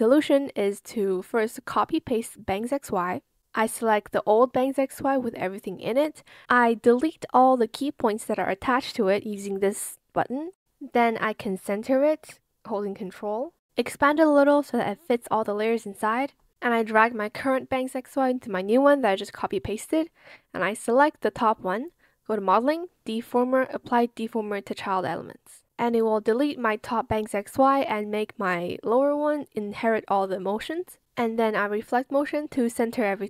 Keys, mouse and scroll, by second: 2.0 ctrl+c, 2.4 ctrl+v, 5.2 shift+click, 14.7 ctrl+alt+click.